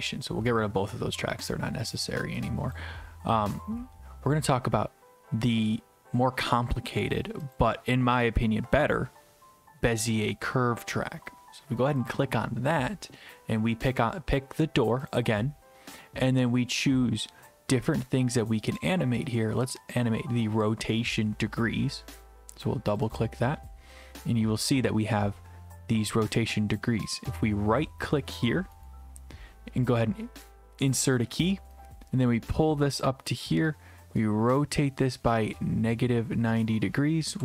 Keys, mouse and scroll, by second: 2.8 click, 7.6 click, 12.1 click, 15.2 click, 19.9 click, 23.1 click, 27.4 right click, 28.9 right click, 31.0 click.